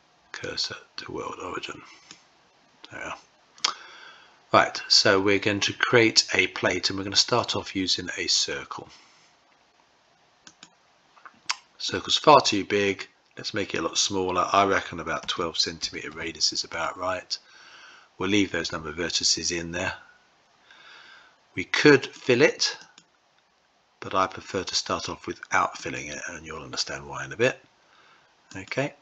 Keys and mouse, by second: 7.3-10.6 drag, 12.8-22.2 drag, 22.8-25.9 drag, 28.4 click.